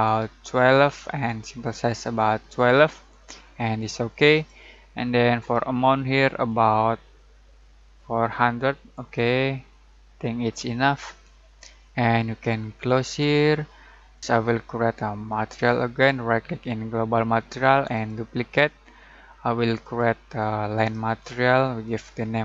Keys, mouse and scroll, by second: 4.3-8.9 drag, 13.1 click, 15.2 right click, 17.9 click, 20.7 right click, 21.8 click.